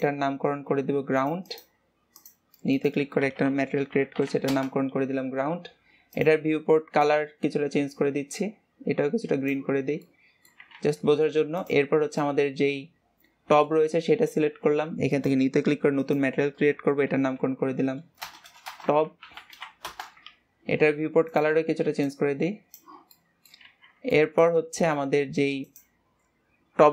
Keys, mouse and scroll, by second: 6.1-9.1 drag, 9.7 scroll down 3, 10.0-10.8 middle drag, 10.8 ctrl+s, 11.0-11.6 scroll up 2, 11.6-12.2 drag, 12.2-13.9 middle drag, 13.9 scroll up 1, 15.0-18.4 drag, 18.4 BackSpace, 21.2 click, 23.1 middle click, 23.7 ctrl+s, 23.8-24.1 scroll up 2, 24.1-25.6 middle drag, 25.6 click.